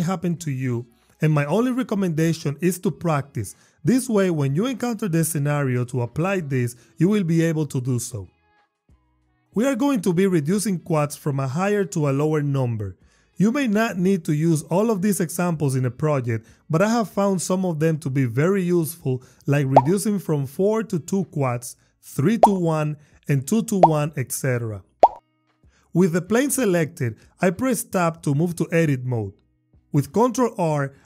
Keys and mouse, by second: 25.9 Tab, 30.6 ctrl+r.